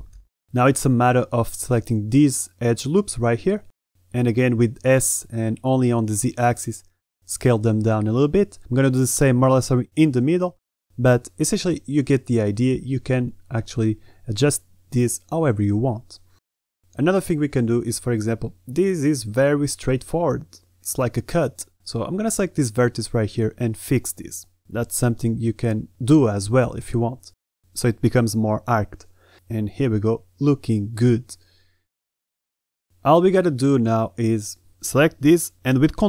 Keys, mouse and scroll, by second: 0.5 a, 3.2 alt+shift+click, 3.7 a, 4.1 alt+shift+click, 4.5 s, 6.7 a, 8.9 s, 10.1 a, 10.8 s, 11.9 a, 12.3 alt+shift+click, 12.6 s, 15.0 Tab, 15.2 middle click, 16.1 a, 16.3 middle drag, 16.6 Tab, 17.0 Tab, 17.2-17.6 middle drag, 17.6-18.0 drag, 18.4-18.9 drag, 19.0 middle drag, 19.3 Tab, 20.1 KP_7, 20.5 shift+middle click, 21.0 z, 21.3 a, 21.9 b, 23.1 b, 24.0 g, 25.3 a, 25.3 b, 25.8 g, 27.1-28.4 typing, 29.6 g, 32.5 a, 33.3 b, 33.8 g, 34.7 Tab, 34.8-35.2 drag, 35.7 ctrl+a.